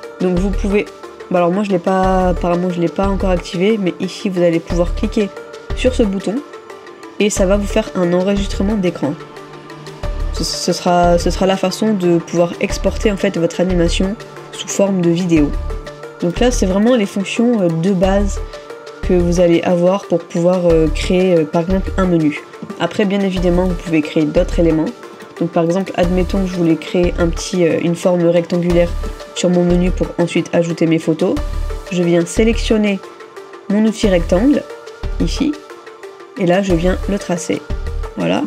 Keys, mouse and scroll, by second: 29.1 middle click.